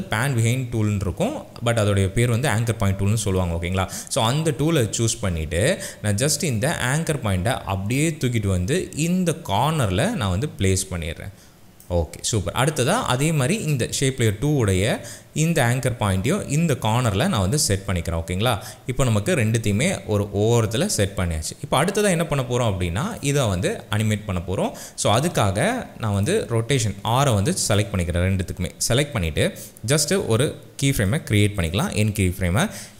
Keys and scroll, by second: 27.1 r.